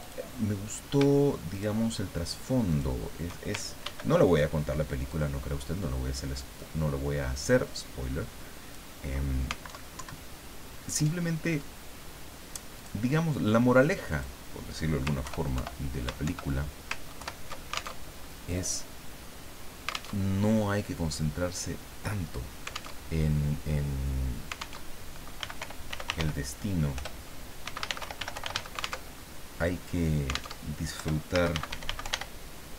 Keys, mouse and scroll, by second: 0.0 click, 1.5 shift+click, 2.7 shift+click, 3.9 ctrl+d, 5.1-8.9 ctrl+drag, 9.7 alt+Down, 12.7 click, 14.1 click, 15.2 ctrl+Home, 15.6 ctrl+End, 16.2 ctrl+shift+End, 17.2 ctrl+shift+Home, 18.0 ctrl+alt+shift+Tab, 20.1 alt+Tab, 23.0 alt+Tab, 24.8 alt+Tab, 25.1-29.0 typing, 26.9 Return, 29.0 alt+Tab, 30.6 alt+Tab, 30.9 alt+Return, 31.1-32.6 typing.